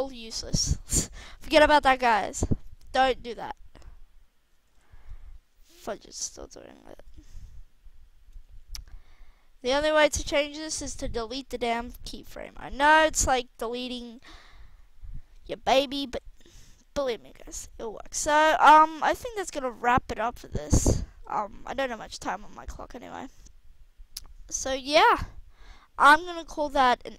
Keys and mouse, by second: 0.6 ctrl+z, 0.9 ctrl+z, 2.7 alt+a, 4.9 alt+a, 13.4 Delete, 16.1 alt+a, 25.1 alt+a.